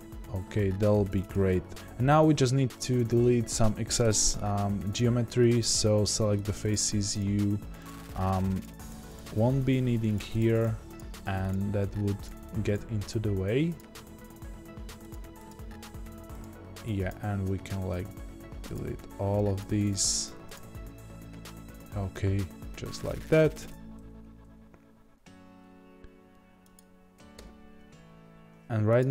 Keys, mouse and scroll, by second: 1.7 click, 4.0 3, 5.6 click, 6.4 shift+click, 18.7 x, 19.5 click, 20.5 x, 23.0 Tab, 23.9 a, 27.3 2, 29.0 alt+click.